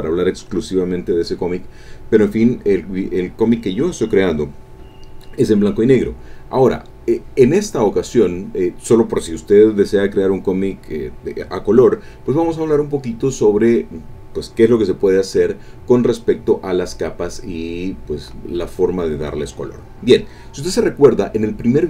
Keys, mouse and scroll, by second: 7.8-9.1 drag, 17.6 click.